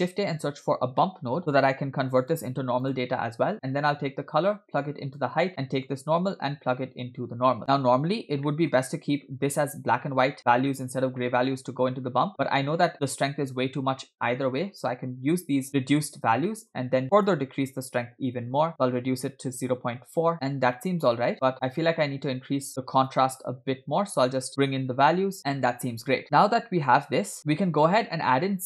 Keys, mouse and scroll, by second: 3.9 click, 4.2-5.3 drag, 5.9-7.6 drag, 7.6 middle click, 8.2 scroll down 1, 8.5-10.4 middle drag, 11.2 middle click, 12.5 scroll up 3, 13.6 scroll up 2, 14.1 middle click, 14.8-15.5 scroll down 2, 16.5 middle click, 16.8 scroll up 1, 17.2-20.0 drag, 20.3 scroll up 3, 20.8-21.3 shift+middle drag, 21.3 scroll up 1, 21.9 click, 23.1-25.4 drag, 25.4-25.9 scroll down 3, 25.4 space, 25.9-27.3 space, 27.4-27.8 scroll down 4.